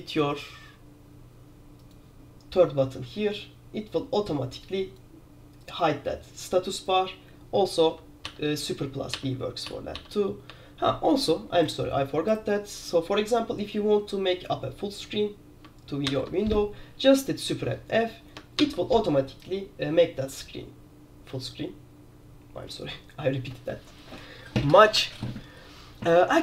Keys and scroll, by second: 8.3 super+b, 9.8 super+b, 10.6 super+1, 16.2 super+f, 18.7 super+f.